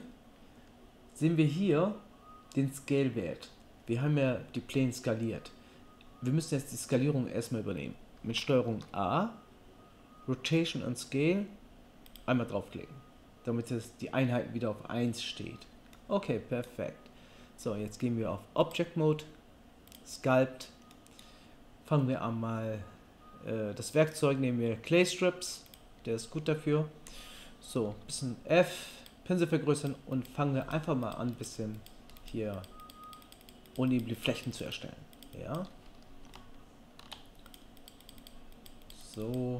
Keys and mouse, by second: 8.7 ctrl+a, 15.9-18.6 right drag, 18.6-29.1 middle drag, 27.9 f, 29.1 click, 29.8-39.5 middle drag.